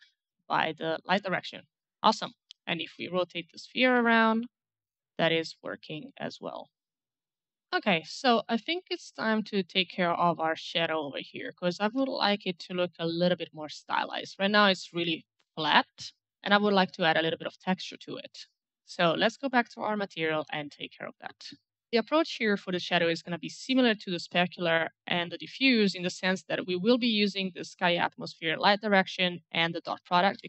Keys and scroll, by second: 2.7 e, 3.7 w, 4.0 e, 8.4 a, 11.7 w, 12.0 q, 14.5 s, 15.9-16.8 typing, 30.0 ctrl+c.